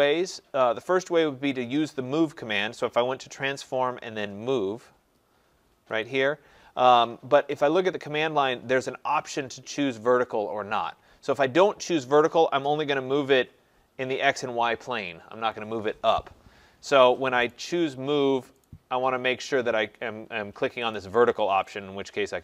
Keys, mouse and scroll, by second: 3.0 click, 6.1 click, 12.2 click, 16.8 Escape, 17.5 right click, 18.7 right click, 21.0 click, 21.8 click.